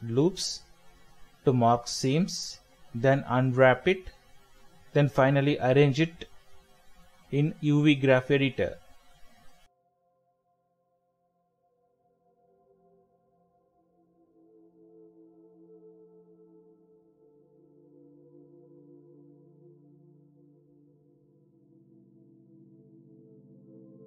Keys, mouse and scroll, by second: 0.7 alt+shift+click, 1.0-1.5 scroll down 1, 1.5 middle click, 2.5 right click, 11.7 middle click, 12.0-12.7 scroll up 1, 12.7 middle click, 14.1 scroll down 1, 14.3 middle click, 21.3 alt+shift+click, 22.7 middle click.